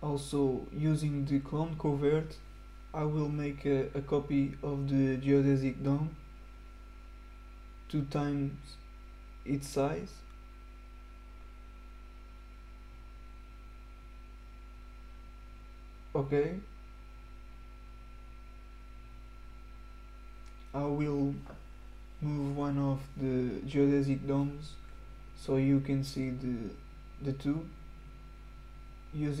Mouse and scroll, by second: 0.5 click, 4.5 click, 8.0 click, 11.0 click, 16.8 click, 19.2 click, 21.4 click, 22.6 right click, 23.9 click, 24.9 click, 25.3 click, 27.0 click, 27.3 click, 28.3 click.